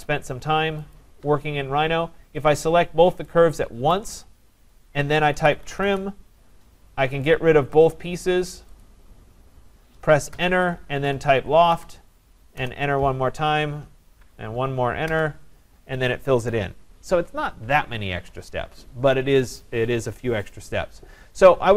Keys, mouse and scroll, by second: 1.0 shift+click, 3.9 right click, 4.2-4.8 scroll, 5.1-6.2 typing, 5.6 scroll down 3, 7.4 click, 7.9 click, 8.8 click, 10.3 Return, 10.8-11.7 typing, 15.1 Return, 16.5 click.